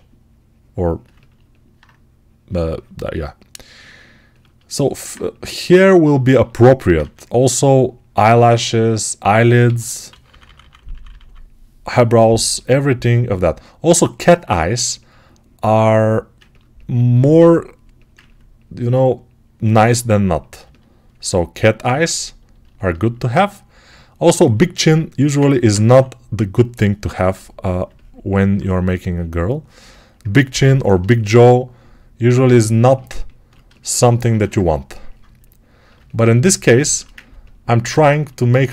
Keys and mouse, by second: 0.9-24.1 ctrl+alt+right drag, 6.9 1, 9.5 g, 9.9-12.3 ], 25.7 3, 34.1 1, 35.8-38.7 right drag.